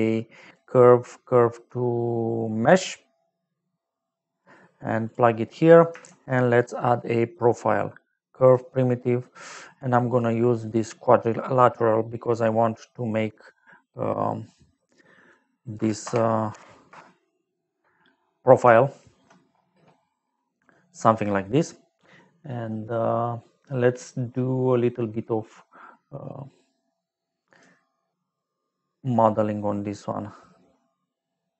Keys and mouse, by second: 0.3 click, 4.3 click, 6.0 shift+a, 10.0 click, 10.6 click, 11.3 click, 14.5 click, 15.7 KP_Decimal, 16.0 KP_0, 16.5 KP_1, 16.8 Return, 18.7 shift+middle click, 21.7 middle click, 28.3 shift+click.